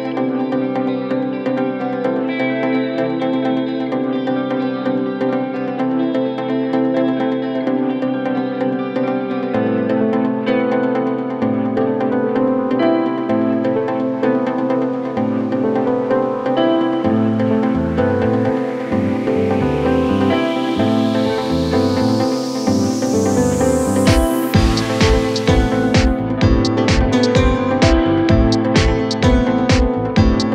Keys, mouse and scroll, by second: 1.2 space, 6.1 space, 11.7 shift+a, 14.4 g, 14.4 z, 16.6 s, 16.6 z, 19.4 s, 21.3 s, 24.0 ctrl+a, 26.1 Tab, 27.7 ctrl+r, 29.8 click.